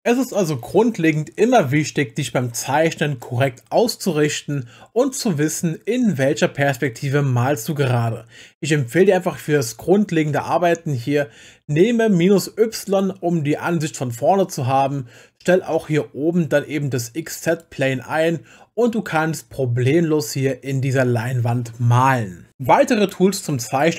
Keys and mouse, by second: 12.9 click.